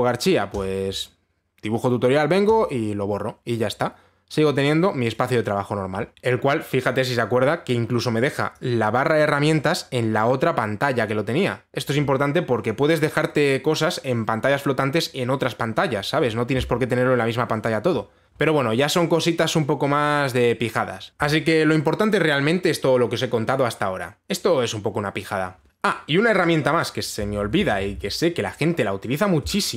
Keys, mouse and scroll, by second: 1.2 click, 3.1 click, 5.7 click, 9.1 click, 27.8-28.5 typing, 28.9-29.7 scroll.